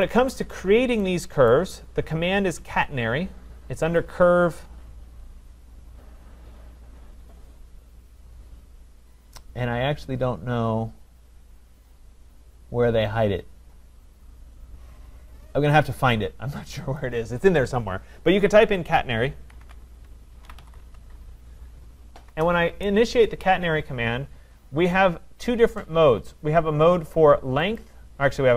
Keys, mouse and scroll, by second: 0.1 click, 0.7 scroll, 1.5 right click, 2.0 middle click, 2.1 middle click, 4.0 click, 9.0 click, 17.0-22.1 drag, 19.6-21.3 typing, 22.3 Return, 27.8-28.5 drag.